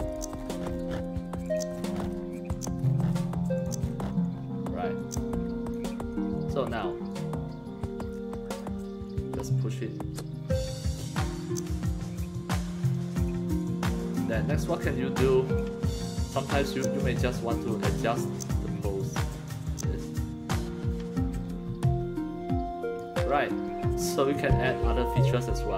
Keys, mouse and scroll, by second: 0.1 click, 0.4-0.8 scroll down 2, 1.4 click, 1.7-2.1 scroll down 2, 2.5 click, 2.8-3.2 scroll down 2, 3.6 click, 3.8 scroll down 1, 5.0 click, 7.1-8.6 drag, 9.0-10.8 drag, 11.4-13.3 drag, 13.6-15.6 drag, 16.7-17.5 drag, 18.2-19.2 drag, 19.6-21.2 drag, 21.5-23.0 drag, 24.2 click.